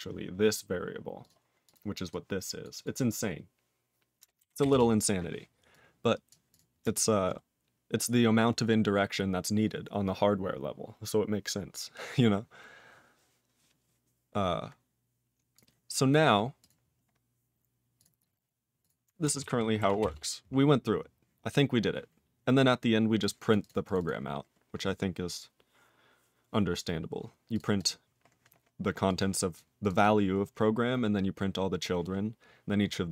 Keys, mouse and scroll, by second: 0.5 click, 1.2 click, 1.3 click, 1.7 click, 1.7 click, 2.1 click, 2.6 click, 2.7 click, 2.8 click, 4.7 Return, 5.7 click, 6.3 click, 6.5 click, 6.5 click, 7.1 click, 7.5-8.1 scroll down 2, 8.1-11.9 scroll up 5, 13.3-14.3 scroll down 6, 14.3-14.9 scroll down 4, 15.5 click, 16.1 click, 16.6 click, 16.7 click, 16.9-17.5 scroll up 4, 18.0 click, 18.0 click, 18.8 click, 18.9 click, 19.4 ctrl+s, 20.1 Return, 20.7-21.5 scroll down 10, 23.2 click, 23.5 click, 23.6 click, 23.6 click, 23.8 click, 23.9 click, 24.0 double click, 24.0 double click, 27.5 click, 27.5 click, 27.8 double click, 27.8 double click, 29.1 click, 29.5 click, 29.8 click, 29.9 click, 29.9 double click, 30.0 double click.